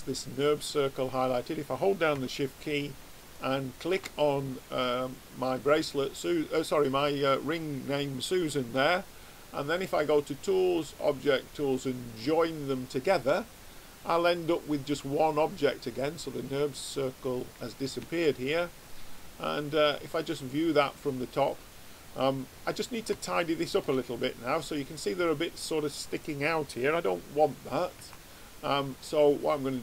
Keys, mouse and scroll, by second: 3.4 click, 5.6-10.2 middle drag, 10.2 click, 14.3-17.6 middle drag, 18.9 click, 22.4-25.7 middle drag, 28.0 Tab, 29.6-29.8 drag.